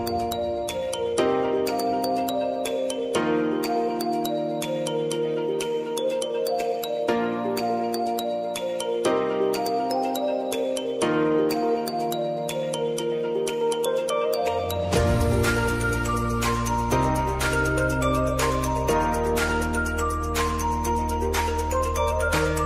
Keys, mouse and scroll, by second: 0.4 Return, 1.5 click, 3.3 Return, 4.8-7.8 drag, 7.8 `, 11.0 click, 12.5 Return, 14.9-15.3 typing, 20.9 space, 21.2 j, 22.0 space.